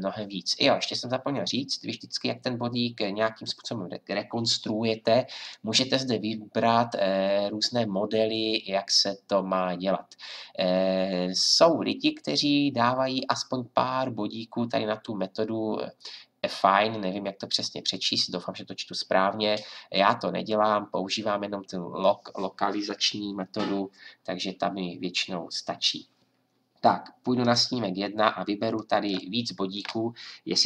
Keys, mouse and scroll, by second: 29.1 click.